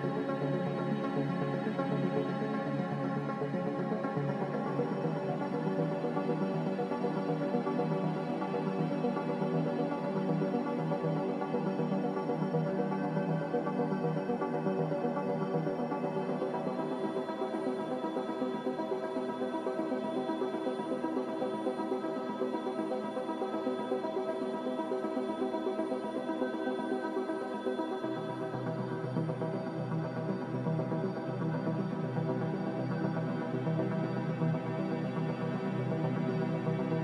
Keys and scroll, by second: 2.3 ctrl+z, 12.9 Delete, 13.7 Delete, 14.2 Delete, 14.9 Delete, 16.2 Delete, 18.5 g, 26.1 z, 34.4 c.